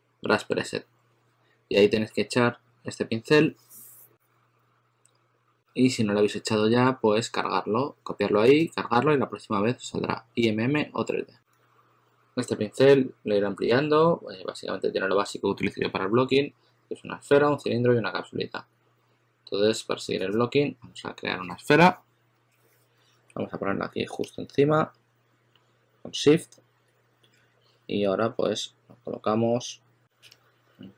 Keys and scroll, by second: 5.0 typing, 27.3 w, 29.7-30.9 typing.